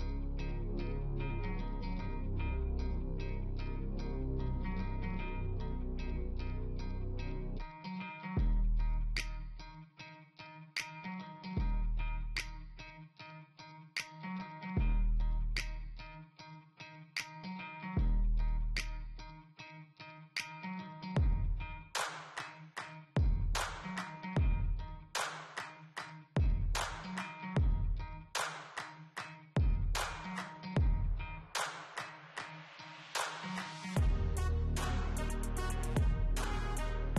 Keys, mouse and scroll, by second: 3.1 scroll down 1, 3.4 scroll up 1, 7.0 scroll down 1, 9.8 scroll up 1, 11.1 scroll down 1, 26.3 right click, 33.3 right click.